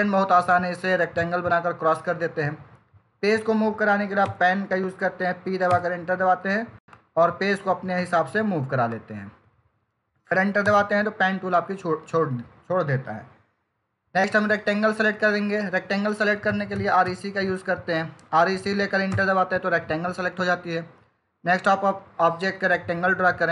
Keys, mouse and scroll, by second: 4.2 typing, 5.6 Return, 6.7 click, 10.5 Return, 16.1-17.4 typing, 19.7 Return, 22.1 click.